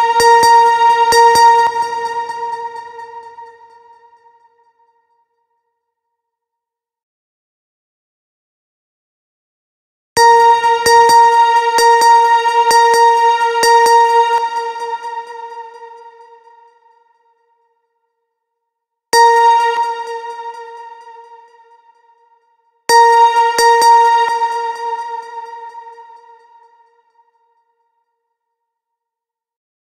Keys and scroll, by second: 1.1 space, 9.6 space, 13.7 space, 18.5 space, 22.3 space, 23.7 space.